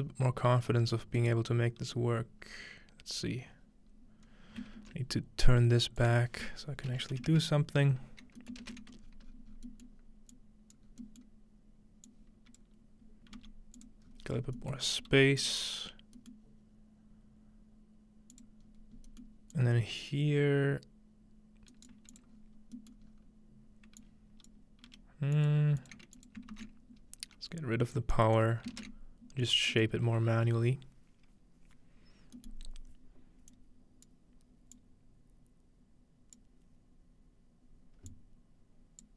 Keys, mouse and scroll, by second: 0.0-0.5 scroll down 1, 1.2 right click, 1.5-2.0 scroll down 2, 2.4-3.2 scroll down 3, 3.7 scroll down 2, 3.9 scroll up 2, 4.3 scroll down 2, 4.8 ctrl+space, 6.0 click, 7.2 typing, 8.4 ctrl+middle click, 8.9 scroll up 1, 9.0 scroll down 1, 9.1 typing, 10.3 click, 10.9-12.6 scroll down 1, 12.1 click, 13.4 g, 13.8 click, 14.1-15.8 scroll up 1, 14.2-17.1 drag, 15.0-16.0 middle drag, 15.8-17.6 scroll down 2, 16.8 middle drag, 18.3-24.9 drag, 18.6-20.5 scroll up 2, 19.5-21.3 middle drag, 20.5-21.3 scroll up 1, 21.7-24.0 right drag, 22.3-23.1 scroll down 1, 22.8-24.2 middle drag, 23.1-24.0 scroll up 1, 24.0 scroll up 1, 24.9 g, 26.5 ctrl+x, 27.2-28.0 scroll down 1, 28.0 click, 28.7 ctrl+space, 29.9-32.0 middle drag, 32.5-34.1 middle drag, 32.7-33.5 scroll up 1, 33.5-37.3 drag, 33.5-34.1 scroll up 1, 38.1 click.